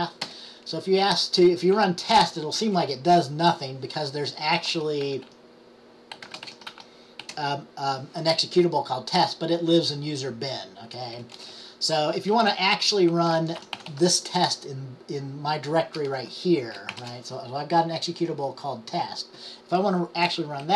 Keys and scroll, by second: 7.5 typing, 13.7 typing, 15.9-17.1 typing.